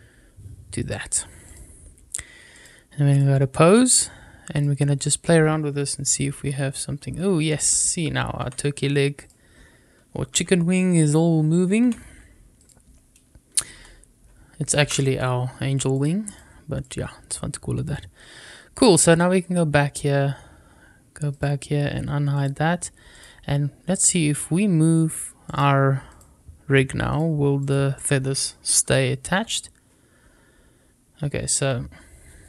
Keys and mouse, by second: 1.3 click, 2.4-3.1 drag, 4.4-6.2 drag, 6.2 r, 8.3 Escape, 9.0 click, 10.2 r, 11.7 Escape, 13.6 r, 14.7 Escape, 15.8 click, 19.0 click, 21.2 drag, 22.3 click, 23.0 drag, 25.3-26.1 drag, 27.5 click, 29.2 r.